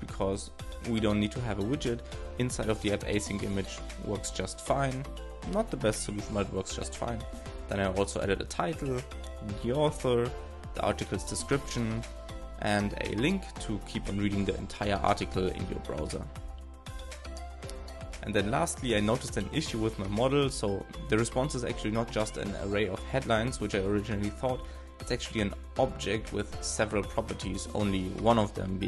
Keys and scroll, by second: 0.7 alt+Left, 2.8 alt+shift+Right, 3.7 shift+p, 4.8 shift+s, 5.8 alt+shift+Right, 6.4 shift+(, 8.9 shift+(, 11.4 shift+9, 14.6-16.0 typing, 20.8 super+r, 24.4 super+Return.